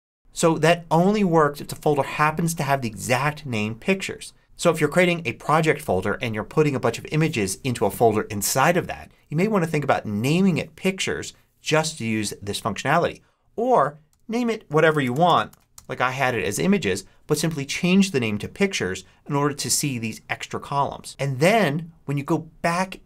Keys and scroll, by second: 0.2 super+Up, 14.0 Return, 14.6 shift+Return, 14.7-15.4 typing, 15.6 Return.